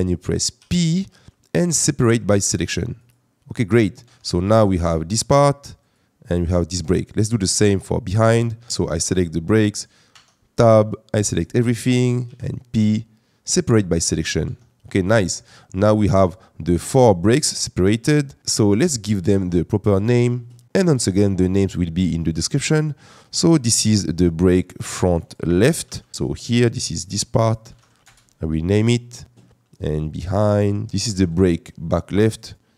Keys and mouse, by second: 0.6 p, 4.0 Tab, 6.8 middle click, 9.1 click, 10.1 Tab, 10.9 click, 12.2 p, 14.4 Tab, 16.2 click, 19.4 click, 26.1 KP_Decimal, 26.7 click, 26.9-28.0 drag, 32.4-32.7 drag.